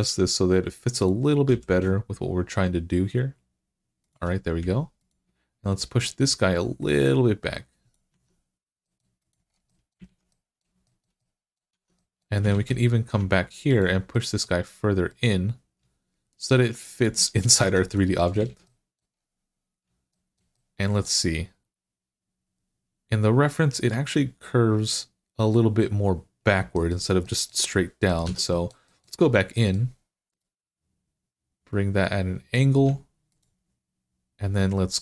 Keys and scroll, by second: 1.3 g, 7.9 Tab, 9.9 alt+z, 11.6 Tab, 12.4 alt+z, 17.5 Tab, 18.3 alt+z, 28.1 Tab.